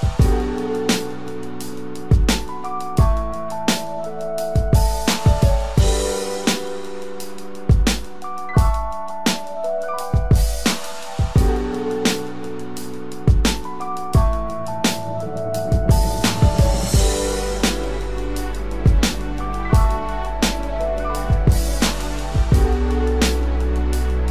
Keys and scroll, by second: 2.2 ctrl+d, 3.3 ctrl+z, 10.9 ctrl+=, 11.5 ctrl+space, 15.3 ctrl+d, 16.4 ctrl+-, 20.5 ctrl+=, 22.2 ctrl+=.